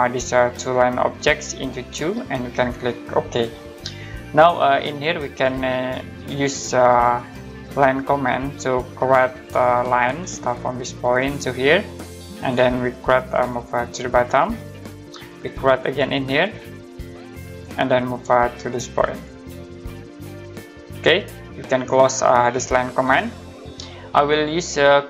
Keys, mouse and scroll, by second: 1.1 click, 1.9 2, 3.1 click, 4.2-5.3 scroll up 1, 8.9 click, 16.0 click, 17.5 click, 19.1 click, 22.4 middle click, 23.5-24.0 scroll up 1, 24.0 middle click.